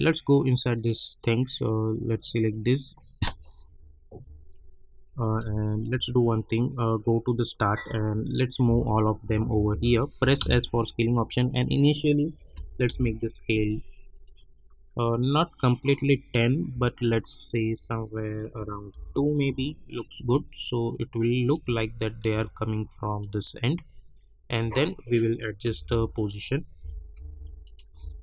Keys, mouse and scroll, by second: 3.3 space, 5.8 shift+click, 7.0-8.6 drag, 8.6-10.4 typing, 11.6 click, 12.8 Return, 14.1 click, 15.3 scroll down 1, 15.9 click, 16.2 scroll up 1, 16.9 shift+click, 18.3 click, 18.9 Return, 19.5 space, 21.2 click, 21.6 space, 23.2 click, 23.7 scroll down 1, 25.3 click, 25.6 Page_Down, 26.1 click, 26.8 [, 27.1 Page_Down, 27.6 click, 27.9 p.